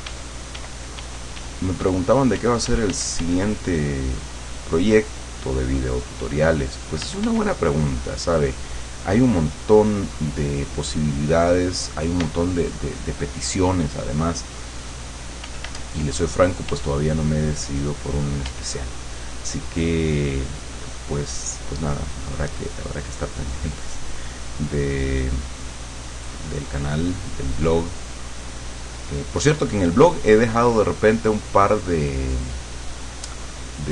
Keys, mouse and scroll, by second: 2.4 f, 3.8-4.8 drag, 6.0 middle click, 7.1 f, 7.8 click, 10.0 click, 12.2 d, 13.7 click, 14.7 click, 15.5 f, 16.7 f, 17.3-18.6 drag, 18.5 f, 18.8-24.3 drag, 24.4-26.2 drag, 26.3-30.6 drag, 31.0-33.3 drag.